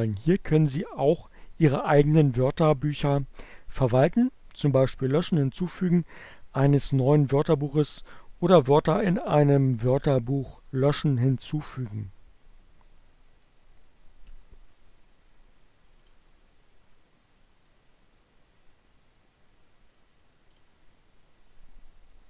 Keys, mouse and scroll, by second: 15.2 click, 18.8 click.